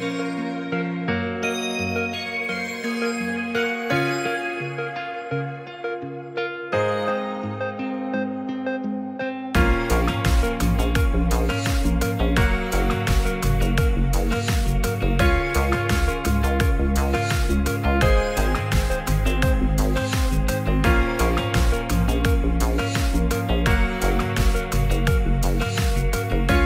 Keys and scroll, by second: 12.9 z, 14.4 z.